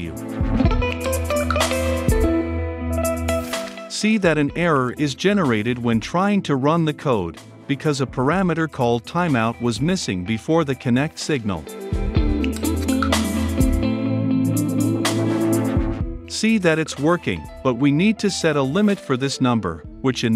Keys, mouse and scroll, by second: 0.4 click, 0.7 ctrl+space, 0.8 Return, 1.0 click, 1.3 Return, 1.5-3.4 typing, 3.6 click, 3.7 ctrl+s, 4.3 ctrl+F5, 7.1 click, 7.8-9.7 typing, 10.8-11.7 typing, 11.5 click, 12.3 ctrl+s, 12.7 ctrl+F5, 18.9-19.7 right drag, 19.7-20.3 drag.